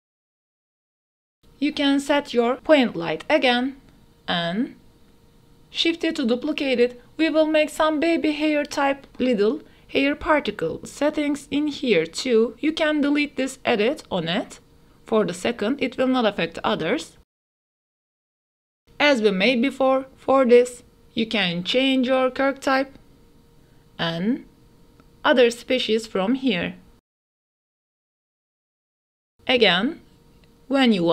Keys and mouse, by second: 0.8 ctrl+s, 1.0-4.4 typing, 1.5 click, 2.3 click, 2.6 click, 3.9 click, 5.2 click, 5.9 Delete, 6.1 ctrl+s, 8.0 click, 8.3 shift+d, 9.4-13.0 typing, 9.9 KP_Enter, 16.8 click, 17.6-19.8 drag, 20.0-21.1 drag, 24.2-24.8 drag, 25.1 ctrl+s, 25.6 click, 26.4 click, 27.8-28.8 drag, 29.2-30.4 middle drag, 30.8 ctrl+s.